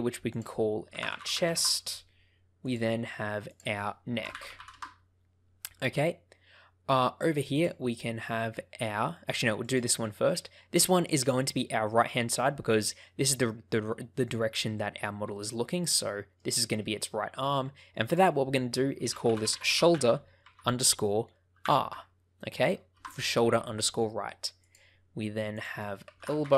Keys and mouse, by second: 0.3-1.9 drag, 2.5 click, 3.5-5.1 drag, 7.5 click, 8.3 middle click, 9.1 middle click, 10.2 middle click, 11.3 middle click, 12.2-13.3 middle drag, 15.3-16.3 middle drag, 18.0-23.7 drag, 25.5-26.5 drag.